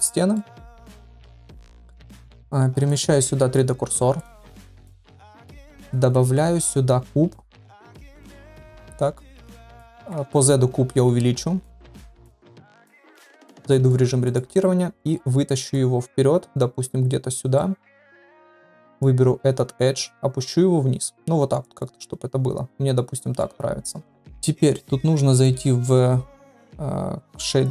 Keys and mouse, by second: 0.0 click, 0.3-0.6 middle drag, 0.9 shift+middle drag, 1.7 shift+middle drag, 2.2 middle click, 2.8 click, 3.4 shift+s, 5.8 click, 6.2 shift+a, 9.5-9.8 middle drag, 10.0 s, 12.3 click, 13.3 Tab, 13.6 middle click, 14.0 3, 14.9 middle click, 15.9-17.3 drag, 17.5 middle click, 18.5 2, 19.9-21.6 drag, 22.0-23.4 middle drag, 24.1 Tab, 24.2 middle click, 25.3-27.7 drag.